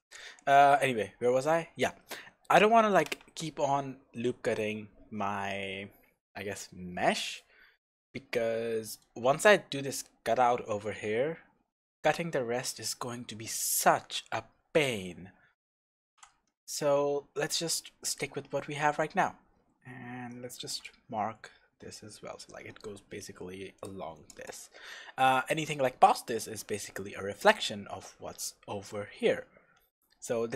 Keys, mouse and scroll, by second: 0.5-2.1 scroll down 1, 2.1-20.7 shift+middle drag, 8.6-12.5 scroll up 1, 15.8 scroll up 1, 20.7 click, 28.0-29.1 scroll down 1, 29.1-29.7 scroll up 1.